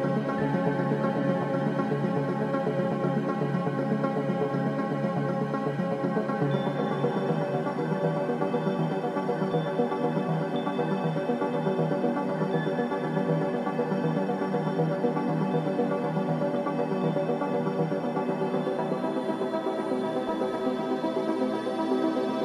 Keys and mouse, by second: 0.5 g, 4.7 ctrl+r, 6.5 click, 6.7 g, 10.7-12.9 shift+middle drag, 14.5 g, 16.1 click, 16.4 g.